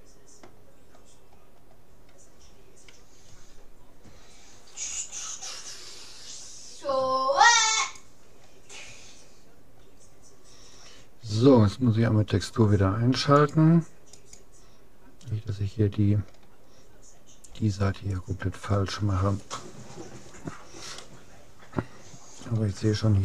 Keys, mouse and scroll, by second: 1.5-3.3 scroll up 1, 3.3 a, 4.9 g, 8.9 a, 9.5 middle click, 13.5-15.9 drag, 17.3-19.3 middle drag, 21.1-22.7 middle drag, 22.9 scroll up 1, 23.1-23.2 middle drag.